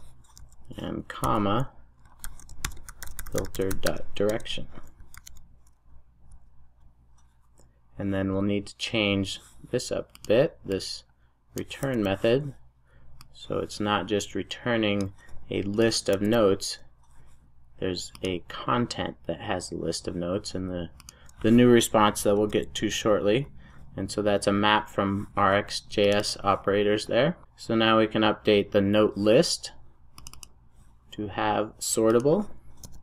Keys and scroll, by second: 4.3 Return, 5.0 super+s, 16.1 super+v, 22.4 alt+Return, 27.4 super+s.